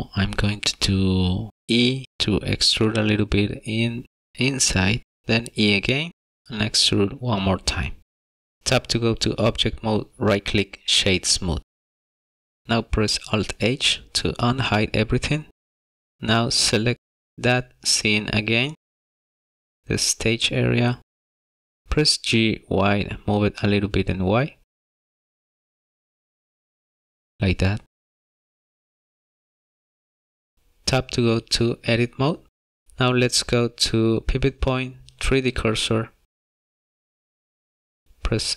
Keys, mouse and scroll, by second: 0.1 e, 3.9 e, 8.6 middle click, 8.6-9.0 scroll down 2, 9.1 Tab, 11.2 right click, 12.6 middle click, 13.9 alt+h, 16.2 click, 16.2 middle click, 17.2 scroll down 1, 17.8 shift+middle click, 18.6 middle click, 19.8-20.3 scroll up 2, 20.6 middle click, 21.8 middle click, 22.3 g, 22.7 y, 25.6 middle click, 28.6-29.5 scroll down 3, 29.5 middle click, 30.3 s, 33.7 click, 38.1 s.